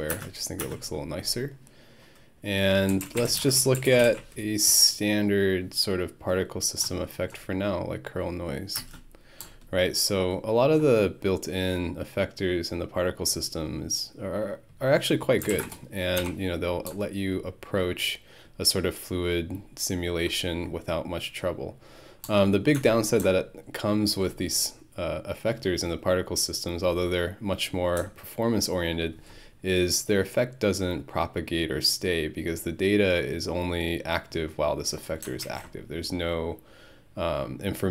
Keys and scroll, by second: 0.1 space, 0.6 space, 2.6-4.4 typing, 8.8 space, 15.2-16.0 typing, 16.2 Home.